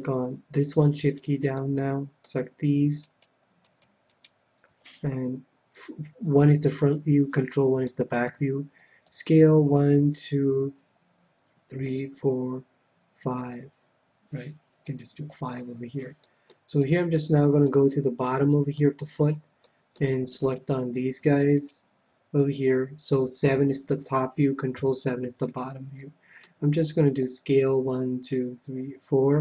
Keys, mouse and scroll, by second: 1.5-3.1 middle drag, 2.9-5.7 right drag, 5.7 KP_1, 6.9 ctrl+KP_1, 7.8-9.8 middle drag, 9.0 s, 14.9-16.5 drag, 15.2 a, 15.5-19.6 middle drag, 19.8-21.5 middle drag, 20.4-23.3 right drag, 23.4 KP_7, 24.7 ctrl+KP_7, 26.0-27.6 middle drag, 27.1 s.